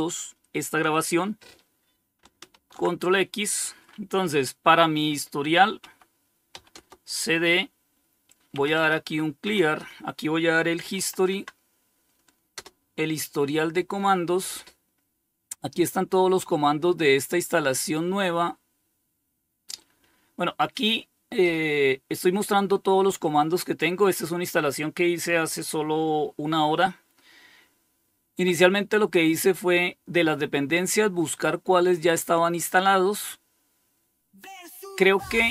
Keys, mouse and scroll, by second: 1.8 ctrl+x, 5.0-5.8 typing, 6.0 Return, 7.6-10.4 typing, 8.8 Return, 10.5 Tab, 11.8 Return, 30.4-32.6 drag, 35.4-35.5 drag.